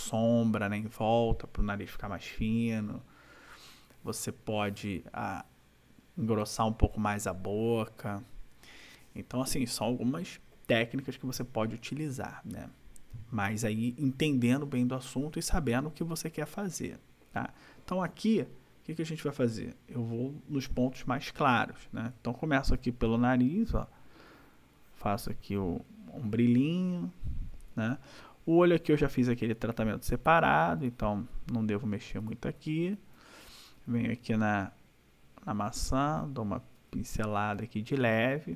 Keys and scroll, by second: 22.7 ], 27.6 ], 31.9 \, 36.8 ], 38.2 ].